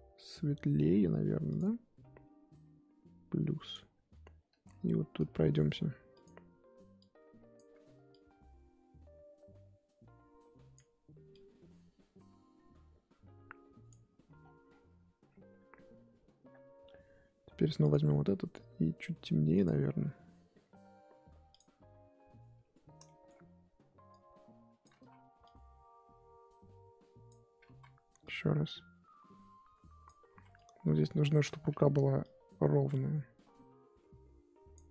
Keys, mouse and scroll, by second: 1.5-5.2 drag, 5.2 f, 6.9-14.4 drag, 14.4-15.2 scroll down 10, 15.2-17.9 scroll up 8, 17.9 click, 19.5-22.6 drag, 22.6-23.0 scroll up 2, 23.0-24.1 shift+middle drag, 24.1 click, 24.9 ctrl+z, 25.4-27.6 drag, 27.6 ctrl+z, 28.2-30.3 drag, 30.3 ctrl+z, 30.5-31.5 drag, 31.5 ctrl+z, 32.2-34.9 drag.